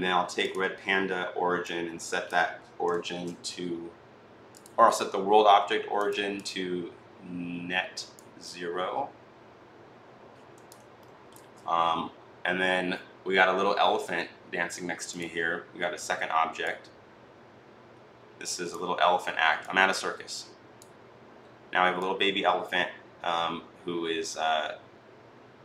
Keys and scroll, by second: 2.9 ctrl+z.